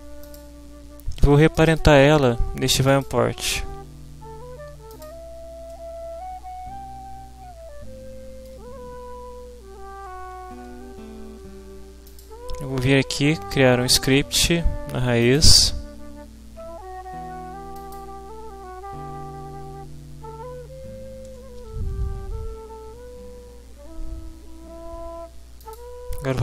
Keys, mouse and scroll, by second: 0.2 click, 1.5 click, 4.9 click, 5.7-8.6 middle drag, 12.1 click, 15.2 click, 17.7 click, 21.6 ctrl+s, 25.6 click.